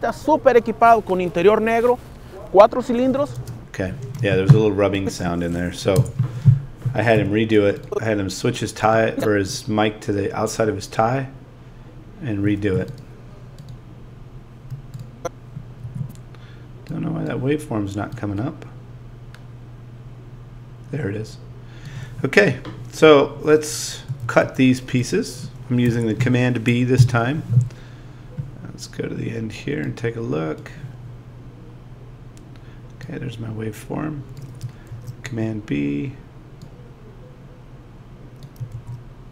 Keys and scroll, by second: 3.4 space, 5.9 BackSpace, 7.1 z, 15.8 a, 25.9 BackSpace.